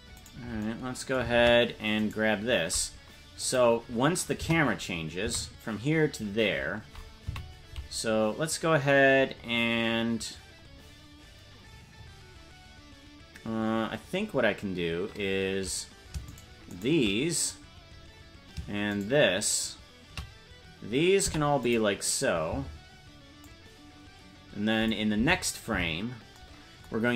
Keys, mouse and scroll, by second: 0.3 right click, 0.3-0.6 scroll down 5, 1.4 ctrl+Tab, 2.1 right click, 3.4 click, 4.3 KP_0, 5.3 Right, 7.3 Left, 16.4 shift+right click, 17.9-18.6 scroll down 4, 19.0 shift+right click, 21.2 i, 23.4-24.9 drag, 25.2 Left, 25.8 Right, 27.0 scroll down 4.